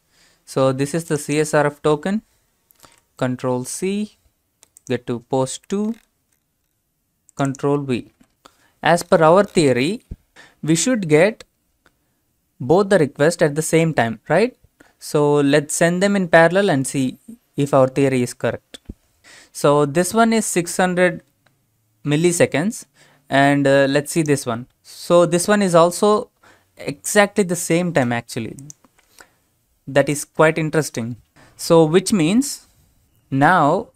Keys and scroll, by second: 2.8 ctrl+c, 8.2 ctrl+v.